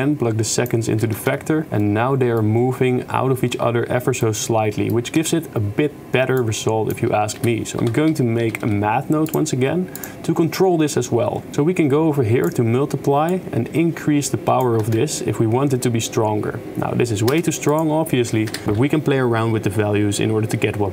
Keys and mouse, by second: 0.0-0.8 drag, 1.2 shift+space, 1.8-2.5 middle drag, 4.3-4.8 middle drag, 5.3 shift+space, 6.7 click, 7.4 shift+a, 11.5-12.5 drag, 13.3-14.8 shift+drag, 15.0 shift+space, 17.4 shift+space, 17.7 click.